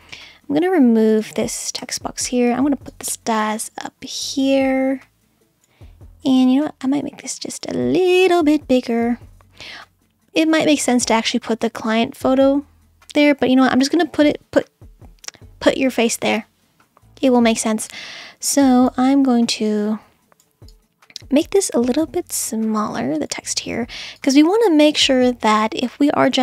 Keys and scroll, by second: 0.0-0.3 typing, 1.8 BackSpace.